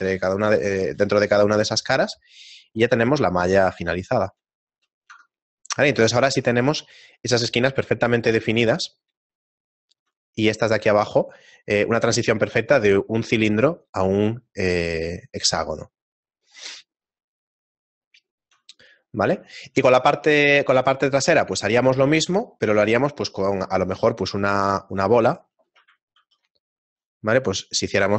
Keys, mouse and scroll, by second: 0.3 shift+middle click, 1.8 shift+middle click, 5.7 Tab, 5.7 shift+middle click, 5.8 scroll down 1, 7.2 shift+middle click, 7.2-7.8 scroll down 2, 11.0 shift+middle click, 14.6 middle click, 15.8 shift+middle click, 18.2 shift+middle click, 18.8 middle click, 19.1-19.7 scroll down 1, 19.8 middle click, 21.1 shift+middle click, 23.5 middle click, 24.4 middle click.